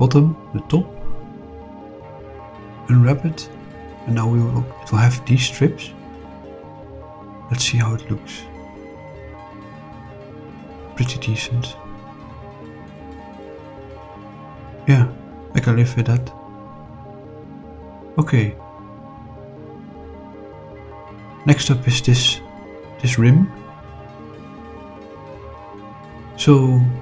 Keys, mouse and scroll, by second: 0.5 middle click, 2.3 shift+click, 3.3 click, 3.8 click, 4.7 click, 5.9 scroll up 2, 6.5-8.6 scroll up 2, 8.6 click, 9.3 middle click, 10.5 scroll up 2, 11.1-12.0 middle drag, 12.2-12.7 shift+middle drag, 12.9 scroll up 2, 13.7 scroll up 2, 14.3-18.8 middle drag, 18.8 scroll down 2, 20.5-20.9 scroll down 2, 20.9-22.6 middle drag, 23.0 click, 24.1 click, 24.9 click, 25.4 middle click, 26.5 click.